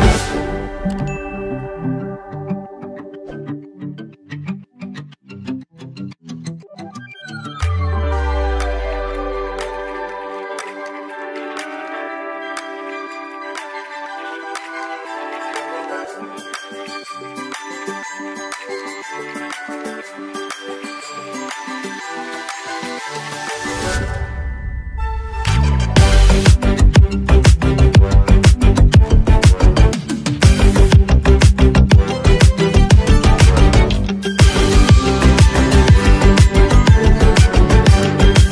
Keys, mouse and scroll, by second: 5.4-24.8 drag, 27.7 click, 33.7-38.5 drag.